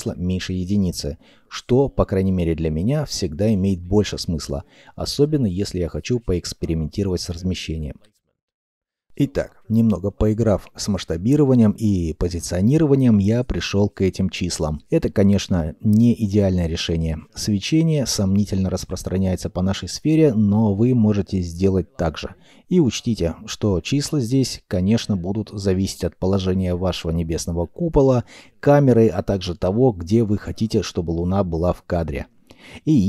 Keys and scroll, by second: 1.6 ., 1.7 1, 2.0 Return, 12.0 ., 12.1 Return, 12.1 2.